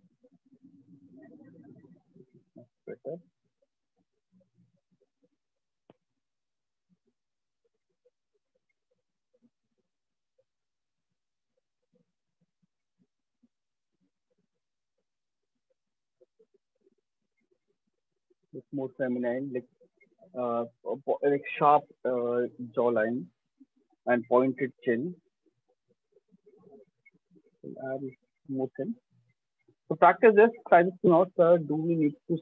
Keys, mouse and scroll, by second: 0.1 click, 0.5 click, 5.4 click, 6.2 click, 10.3 click, 11.7 click, 12.4 click, 13.6 click, 14.3 click, 16.9 right click, 17.7 alt+right click, 18.3 right click, 22.5 alt+click, 22.7 alt+click, 23.4 click, 27.4 alt+click, 27.6 shift+click, 27.8 shift+click, 28.6 right click, 29.2 alt+click.